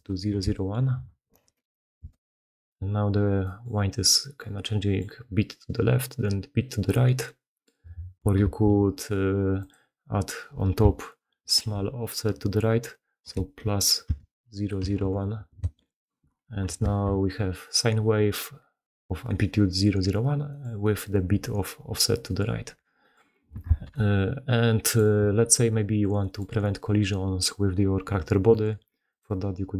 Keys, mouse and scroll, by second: 2.1 shift+space, 3.4 middle click, 3.5 drag, 4.1 click, 5.8 middle click, 6.0 middle drag, 6.4-6.7 middle drag, 7.3 middle click, 8.3 shift+space, 16.8 shift+space, 17.3 middle click, 19.2-19.5 middle drag, 20.5-21.0 middle drag, 23.0 middle click, 23.6 shift+space, 23.8 middle click, 23.9 click, 24.9-26.1 middle drag, 26.3 middle drag.